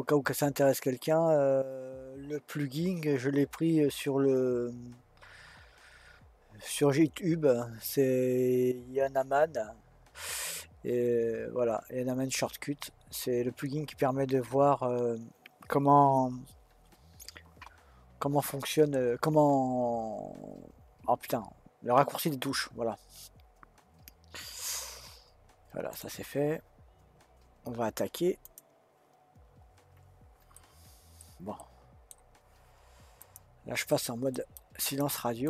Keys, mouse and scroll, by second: 30.6-35.4 middle drag.